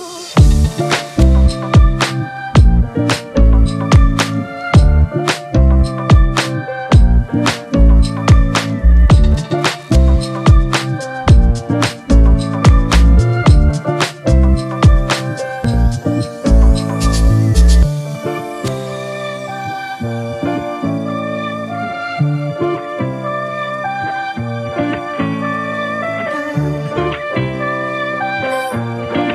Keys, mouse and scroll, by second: 8.2 Return, 10.8 ctrl+t, 13.5 Return, 14.2 ctrl+t, 20.0 Return, 21.3 ctrl+t, 22.6 ctrl+click, 26.9 Return.